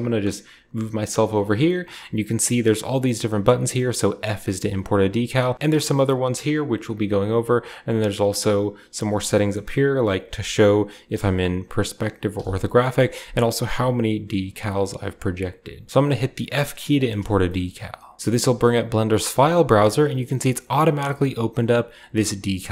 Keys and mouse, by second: 10.9 KP_5, 12.1 KP_5, 22.4 click.